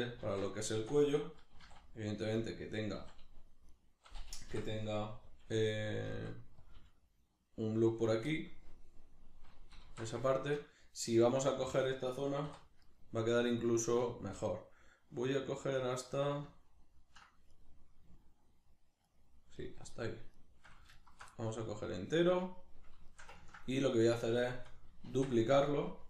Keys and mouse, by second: 1.5 e, 2.5 click, 2.9 s, 3.8 right click, 4.5 o, 6.0 click, 6.1 s, 6.7 click, 6.7 g, 8.1 click, 8.3-12.9 middle drag, 9.9 alt+q, 12.5 3, 12.9 right click, 14.1-17.5 shift+middle drag, 17.5 right click, 19.1 shift+right click, 19.6 shift+right click, 19.9 shift+right click, 20.3 shift+right click, 20.9 alt+shift+right click, 21.3-25.5 middle drag, 25.1 shift+d, 25.5 right click.